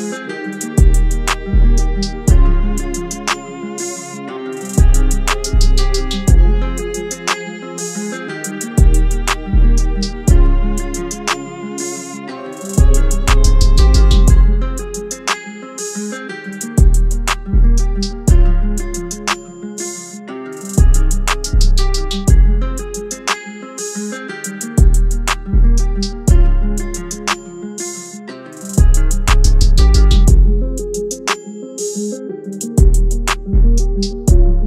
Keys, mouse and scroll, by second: 0.0 shift+Right, 5.7 alt+shift+click, 10.0 Return, 22.8-25.3 scroll down 1, 29.6 double click.